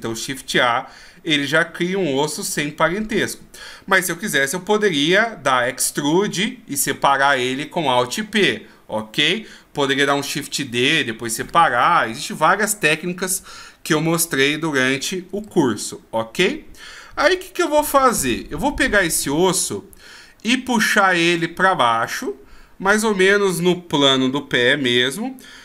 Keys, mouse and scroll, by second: 15.4 ctrl+z, 16.0 scroll up 2, 17.5 KP_3, 21.1 click.